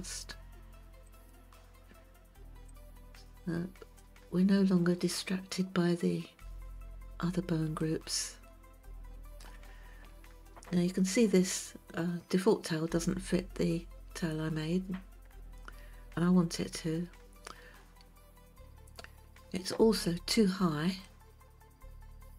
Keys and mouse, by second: 1.1 click, 2.7 click, 5.2 click, 7.8-9.5 shift+middle drag, 21.0-22.3 middle drag.